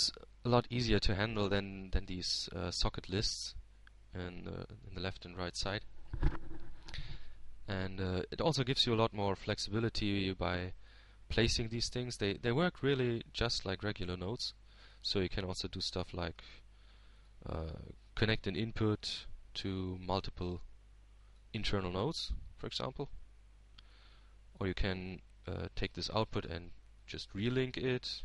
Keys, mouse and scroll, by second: 1.1 click, 2.1 Tab, 3.4-5.0 drag, 5.6-6.6 drag, 12.6-13.7 drag, 14.6-16.2 drag, 16.4-19.0 drag, 20.1 shift+d, 20.9 shift+click, 22.2-25.7 drag, 27.6-28.2 drag.